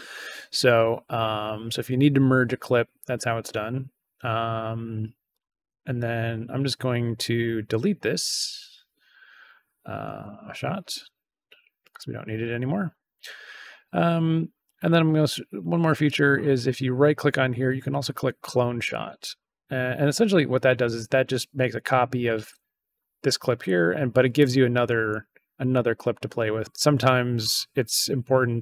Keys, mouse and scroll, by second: 5.2 right click, 10.1 click, 11.8 click, 16.0 right click, 18.8 click, 24.2 click.